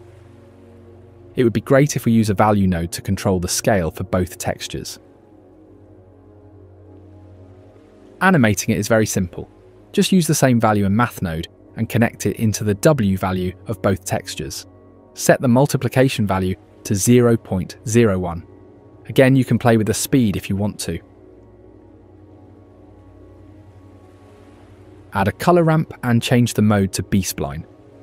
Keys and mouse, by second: 1.7 shift+a, 3.2 click, 3.8 shift+click, 4.2 click, 4.7 click, 5.0 F2, 6.7 click, 8.6 alt+p, 8.8 g, 9.6 click, 9.8 F2, 11.0 click, 11.8 shift+click, 12.1 shift+click, 12.4 g, 13.1 g, 14.1 click, 14.6 drag, 14.7 g, 15.7 click, 15.9 g, 16.5 middle click, 17.2 shift+click, 17.3 g, 18.8 click, 18.9 g, 19.8 ctrl+s, 19.8 click, 24.9 space, 25.3 click, 25.9 shift+a.